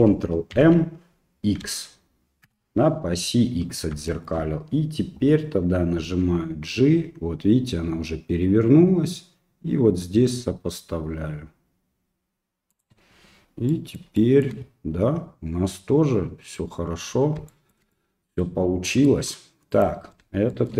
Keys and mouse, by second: 0.5 ctrl+m, 4.2 shift+middle click, 6.0 g, 13.3 middle click, 13.7 middle click, 14.2 shift+middle click, 17.5 shift+middle click, 17.9 middle click, 18.9 middle click, 19.7 right click, 20.6 shift+middle click.